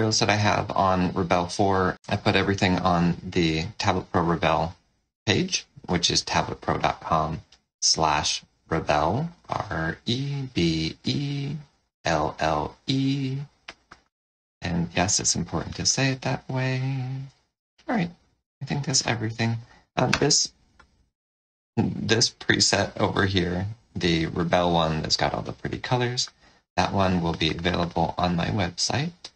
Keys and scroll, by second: 18.4 space.